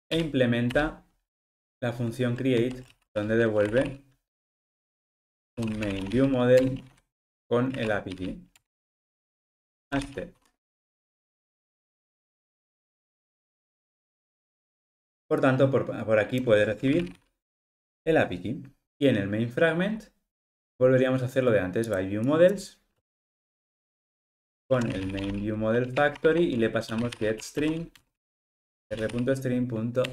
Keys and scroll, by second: 4.5 Return, 10.4 Escape, 11.1 alt+Return, 17.7 Return, 25.9 Return.